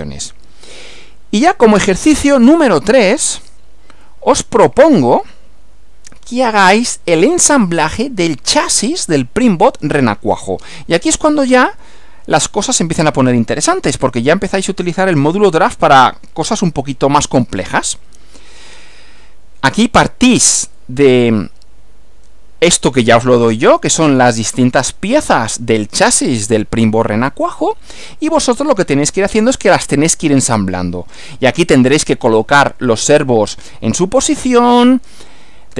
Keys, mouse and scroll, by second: 0.9 click, 2.3 Right, 3.2 click, 4.0 Down, 21.8 Right.